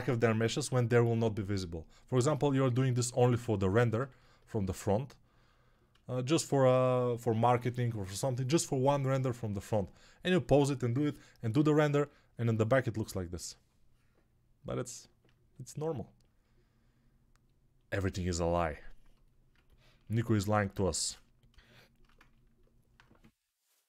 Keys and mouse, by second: 0.0-23.8 typing, 21.0 ctrl+s, 22.8-23.8 middle drag.